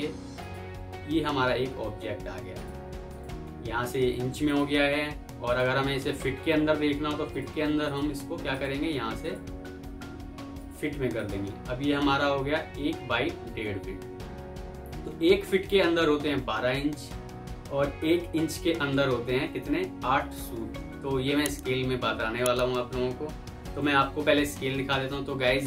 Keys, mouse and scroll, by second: 1.3 F4.